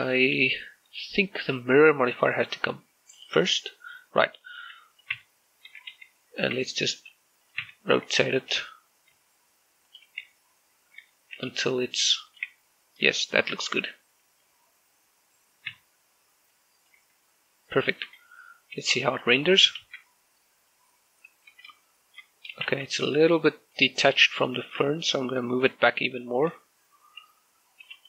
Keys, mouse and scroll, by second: 3.9 click, 5.1-5.5 scroll up 1, 5.5 scroll down 1, 5.7 right click, 5.9 Tab, 6.5 a, 6.7 a, 7.3 Tab, 7.7 r, 8.3 right click, 8.5 Tab, 9.2 r, 10.7 ctrl+click, 11.0 Tab, 12.3 g, 13.1 click, 13.3 Tab, 14.0 shift+middle click, 14.3 Tab, 17.3 click, 17.8 Tab, 19.5 g, 19.9 click, 20.6 shift+z, 21.5 middle click, 22.3 z, 22.7 shift+middle click, 23.5 shift+z, 24.5 shift+click, 26.9 right click, 27.3 Tab.